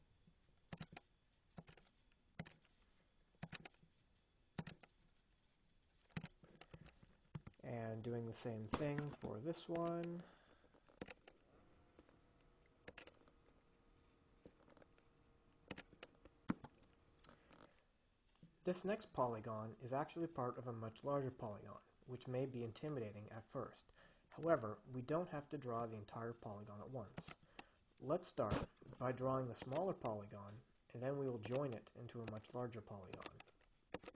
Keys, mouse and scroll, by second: 1.0 click, 1.9 click, 2.6 click, 3.5 click, 6.4 click, 9.2 Escape, 10.0 click, 11.3 click, 13.2 click, 16.0 click, 16.8 Escape, 27.5 click, 29.0 Escape, 29.9 click, 31.7 click, 32.6 click, 33.4 click.